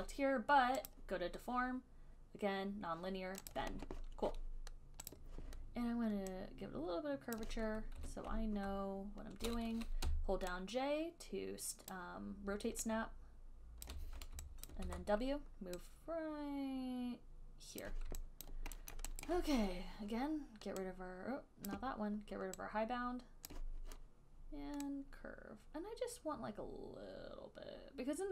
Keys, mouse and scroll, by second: 1.2 click, 3.8 click, 5.4 click, 7.6 click, 8.3 e, 10.3-15.1 typing, 12.1 click, 14.2 click, 18.1 click, 18.6 alt+click, 19.1 alt+middle click, 19.5 alt+right click, 21.9 click, 23.7 click.